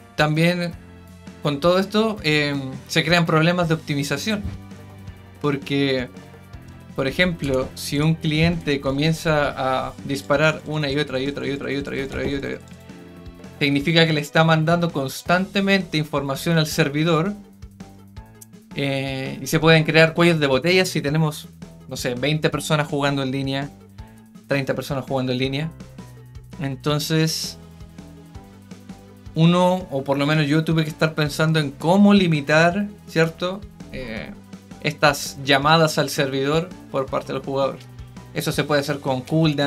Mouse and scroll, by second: 7.9 click, 10.1 right click, 10.3 right click, 10.5 right click, 10.6 right click, 10.8 right click, 10.9 right click, 11.1 right click, 11.4 right click, 11.6 right click, 11.8 right click, 11.9 right click, 12.1 right click, 12.3 right click, 12.4 right click, 12.6 right click, 12.7 right click.